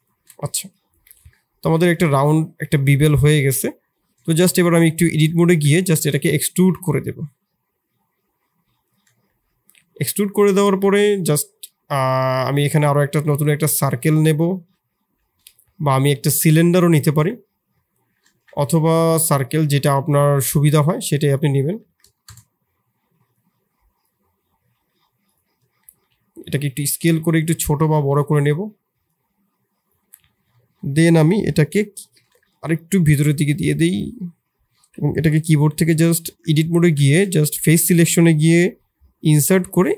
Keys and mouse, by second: 1.1 Tab, 1.6 Tab, 1.9 click, 3.1 click, 3.7 middle click, 4.2 shift+click, 5.3 a, 5.7 e, 9.3 Tab, 11.6 click, 12.4 shift+drag, 12.9 shift+a, 13.7 shift+a, 18.3 ctrl+z, 18.6 shift+a, 20.7 s, 21.5 r, 23.4 click, 24.7 s, 25.5 s, 27.8 middle click, 30.1 middle click, 30.5 shift+middle click, 32.3 middle click, 33.3 click, 34.2 middle click, 34.7 shift+click, 36.2 Tab, 37.0 shift+click, 37.3 3, 38.0 middle click, 38.6 i.